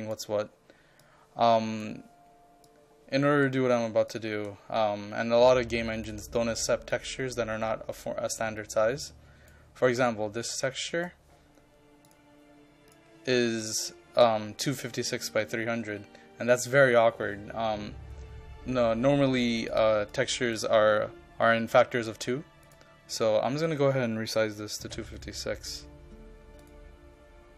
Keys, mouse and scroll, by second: 6.3-23.2 drag, 24.8 KP_2, 25.0 KP_5, 25.3 KP_6, 26.6 click.